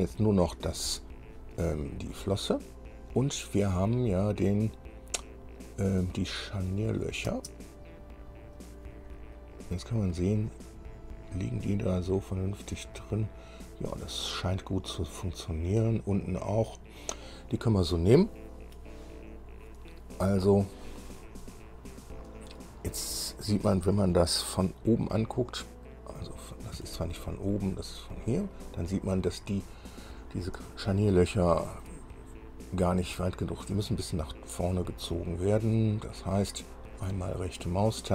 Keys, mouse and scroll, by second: 2.9-3.2 scroll down 2, 7.0 click, 7.5 space, 8.5-8.9 scroll up 1, 9.4-11.1 drag, 11.8-12.1 scroll up 1, 13.0-18.3 drag, 21.7 scroll down 2, 23.3 scroll up 2, 27.0 KP_1, 29.0-29.5 scroll up 2, 30.0-30.3 scroll down 2, 31.1-32.2 shift+middle drag, 37.2 right click.